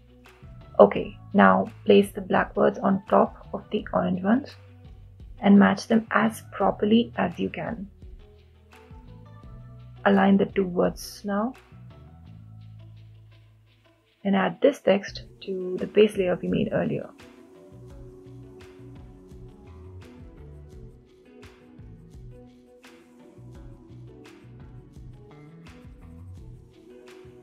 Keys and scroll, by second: 6.0 Left, 6.2 Left, 6.4 Down, 6.6 Down, 6.6 Down.